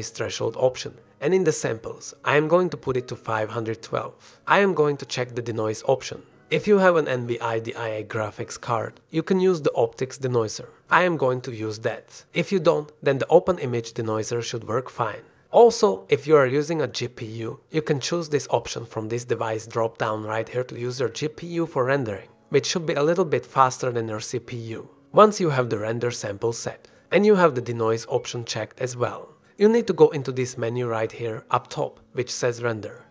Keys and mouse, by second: 0.0 click, 2.5-7.0 drag, 8.7 click, 10.0 click, 11.0 click, 13.8-14.3 drag, 16.0-28.3 drag, 30.5-33.1 drag.